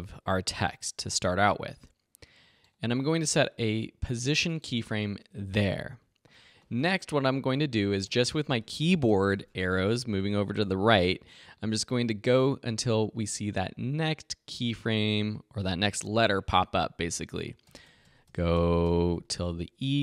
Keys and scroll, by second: 7.3 Right, 10.0 Left, 10.3 Right, 17.7 Right, 19.6 Left, 19.8 Right.